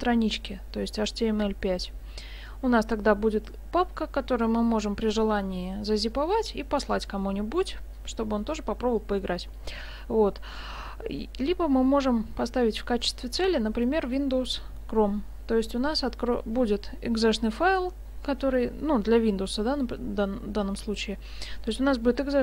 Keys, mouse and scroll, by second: 13.0 click.